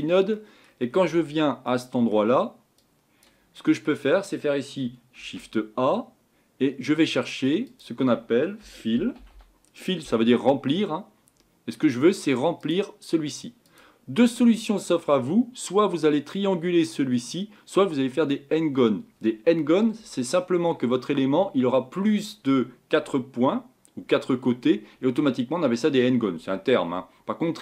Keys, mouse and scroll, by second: 3.0 click.